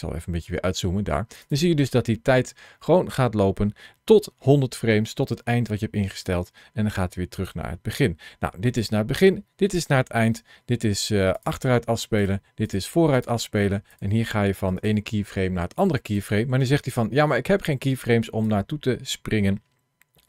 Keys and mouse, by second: 1.2 click, 7.2 click, 8.5 click, 9.6 click, 13.0 click, 13.7 click, 14.6 click, 16.0 click, 18.3-20.2 drag.